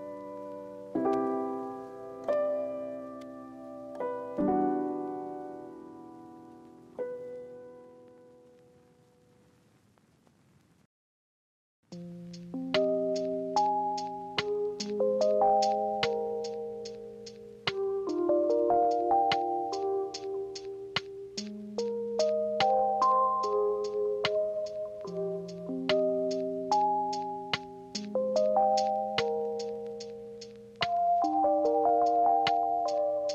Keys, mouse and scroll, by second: 11.5 ctrl+alt+2, 11.7 ctrl+click, 16.5 ctrl+c, 16.7 ctrl+f, 25.1 ctrl+z.